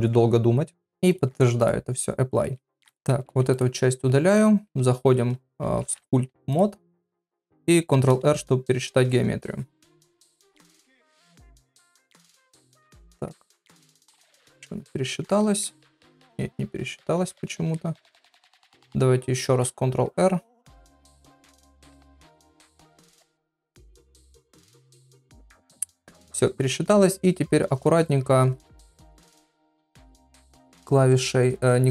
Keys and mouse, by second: 1.1-2.7 drag, 3.2 x, 4.3 click, 5.8 ctrl+Tab, 7.9 shift+r, 15.3 click, 17.8 middle click, 25.9 middle click, 26.3 ctrl+middle click, 27.8 shift+click, 28.9 ], 29.0 ].